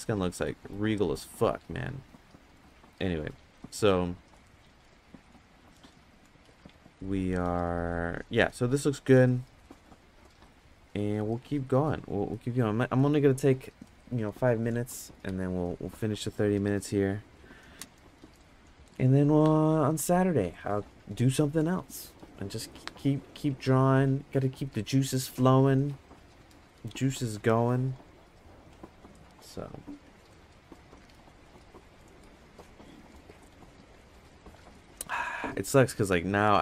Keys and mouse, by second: 0.4 middle click, 1.1 middle click, 2.7 middle click, 3.5 middle click, 4.6 middle click, 5.3 middle click, 10.5 middle click, 11.6 middle click.